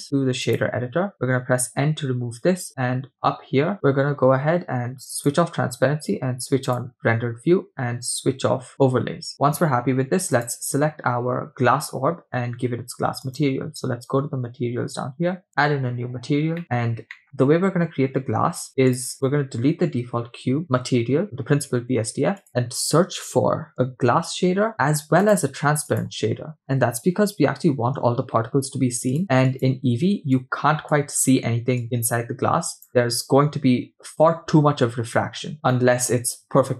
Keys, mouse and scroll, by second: 2.1 n, 3.7-5.2 scroll down 4, 5.2 click, 7.1 click, 8.7 click, 10.3 click, 13.3 click, 15.5-15.9 drag, 16.6 middle click, 16.6-17.1 scroll up 4, 17.1 middle click, 18.9 click, 19.1 click, 20.4 x, 22.0 shift+a, 24.3 s, 25.5 shift+a, 30.4-31.0 drag, 31.8-32.9 drag, 35.5 scroll up 2, 35.7 middle click.